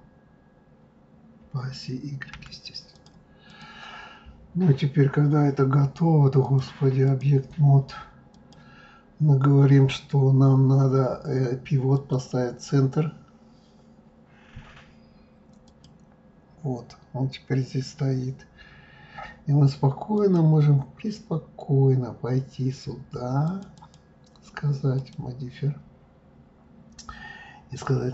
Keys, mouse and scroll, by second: 3.5 click, 4.3-6.3 scroll down 2, 6.4-8.4 drag, 11.9-15.0 drag, 20.1-23.2 drag, 23.8 click, 25.0-28.0 drag.